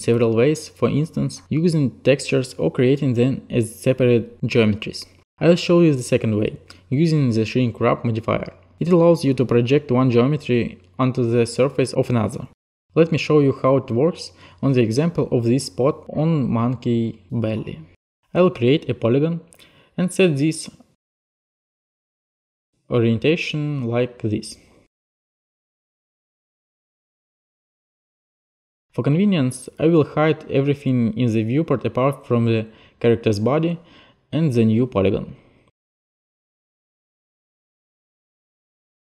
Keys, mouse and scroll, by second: 19.0 click, 21.4 click, 22.1 click, 22.7 click, 24.5 click, 26.6-27.3 scroll, 27.3 click, 29.5 alt+click, 31.1 alt+click, 34.0 alt+click, 36.0 alt+click, 36.7 click.